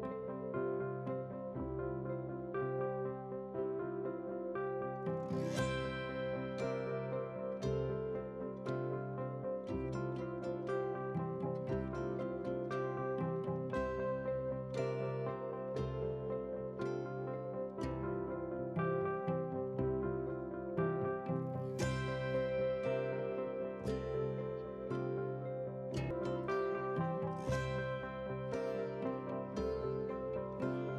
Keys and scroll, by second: 14.9 ctrl+a, 15.9 ctrl+c, 17.0 ctrl+c, 18.3 ctrl+v, 20.0 ctrl+t, 21.4 ctrl+t.